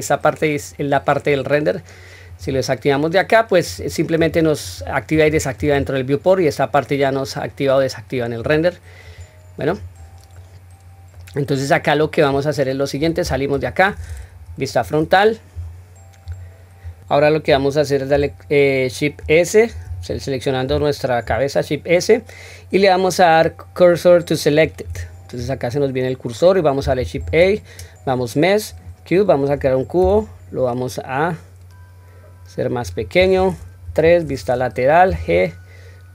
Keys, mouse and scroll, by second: 2.3 click, 3.7 click, 4.2 click, 4.7 click, 5.1 click, 5.6 click, 8.4 click, 9.1 click, 9.7 click, 10.3-11.1 middle drag, 11.5-12.0 scroll down 1, 12.0 middle click, 13.2 Tab, 14.4 KP_1, 15.0 scroll up 1, 15.5-15.9 scroll down 1, 16.2 scroll down 1, 16.8 scroll down 1, 19.9 click, 21.2 shift+s, 27.2 shift+a, 30.0 s, 33.8 KP_3, 35.1 g.